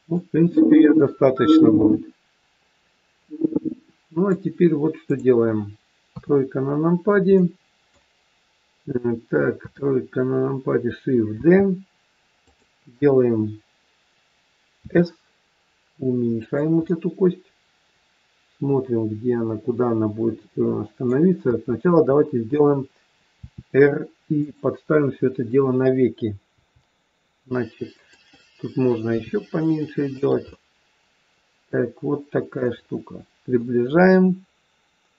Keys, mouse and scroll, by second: 1.7-2.6 scroll up 2, 3.3 middle click, 3.3 scroll up 1, 5.0 click, 6.1 KP_3, 6.7-7.3 scroll down 2, 7.3 middle click, 9.5 KP_3, 11.3 shift+d, 14.7 s, 16.9 middle click, 21.5 KP_3, 23.3 r, 26.4 g, 29.1 s, 30.5 middle click, 32.7-33.5 scroll up 5, 33.6 middle click.